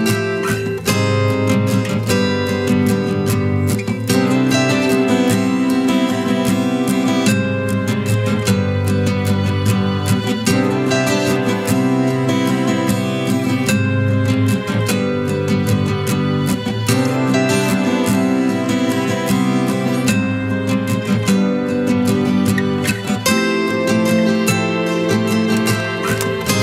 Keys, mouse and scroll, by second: 1.2 double click, 3.3-4.6 typing, 5.0 double click.